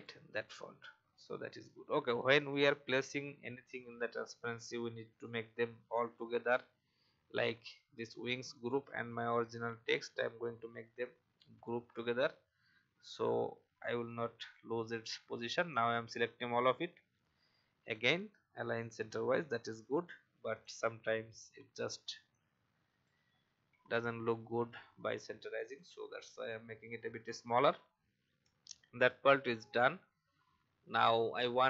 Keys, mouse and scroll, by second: 0.3-2.0 drag, 2.6 alt+scroll up 1, 3.6 scroll up 1, 5.1 click, 8.5 click, 9.8 shift+click, 12.0-12.4 alt+scroll down 1, 13.1-17.2 drag, 19.5 alt+scroll up 1, 20.5 click, 22.3-23.3 alt+shift+drag, 25.6 click, 26.8-27.5 scroll up 1, 28.4 alt+scroll down 1, 28.9 click.